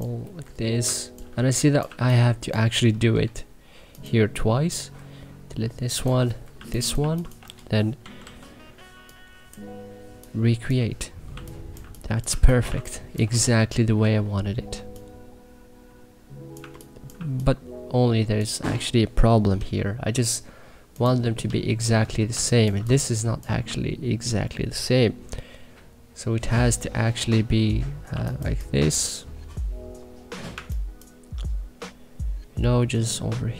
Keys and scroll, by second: 0.4 Delete, 0.5-3.1 typing, 4.9 Delete, 6.5-8.6 typing, 11.3 2, 12.2 1, 12.6 3, 13.9 e, 14.7 3, 16.5 1, 17.0 2, 19.5 k, 22.2 2, 23.5 1, 28.0 2, 30.5 1.